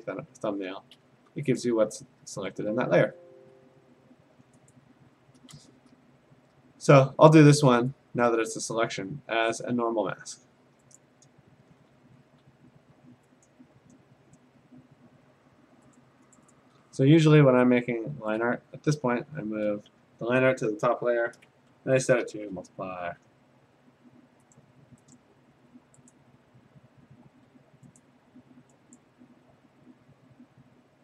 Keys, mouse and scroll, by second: 1.0 Escape, 1.7 ctrl+click, 2.5 ctrl+d, 3.2 Escape, 4.7 ctrl+click, 7.9 click, 8.7 click, 11.0 click, 12.2 g, 13.5 click, 16.0 click, 16.4 click, 16.5 click, 17.5 Return, 18.9 ctrl+], 19.1 ctrl+], 21.1 v, 22.3 alt+shift+m, 24.6 click, 25.2 click, 25.5 g, 26.1 click, 27.3 d, 28.0 click, 29.1 click.